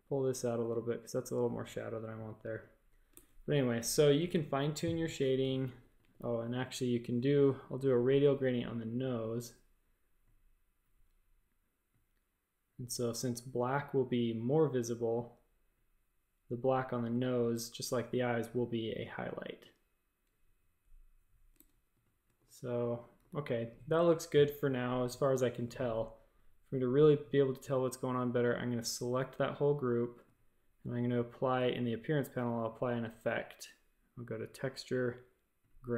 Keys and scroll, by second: 3.1 shift+super+a, 3.7 space, 4.1 v, 5.4-6.6 typing, 20.8-23.1 typing, 21.5 shift+super+a.